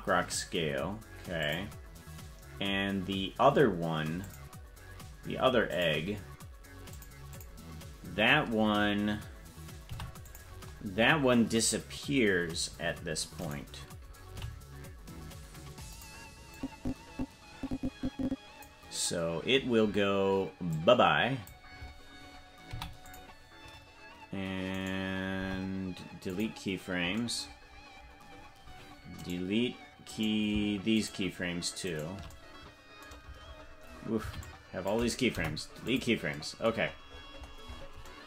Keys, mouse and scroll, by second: 1.4 click, 4.2 click, 4.7-5.7 scroll down 4, 5.7 click, 6.9 click, 7.3 click, 9.8 i, 13.4 right click, 14.3 g, 16.5 click, 17.0-18.6 drag, 19.5-20.0 scroll down 7, 20.7 click, 20.7 scroll down 2, 22.6 i, 24.7 right click, 25.3 Delete, 27.6-29.1 scroll down 12, 29.1 right click, 29.1 scroll down 1, 30.1 right click, 30.9 shift+right click, 31.8 shift+right click, 33.5-34.2 scroll down 12, 34.2 c, 35.3 Delete, 36.8-38.2 scroll up 26.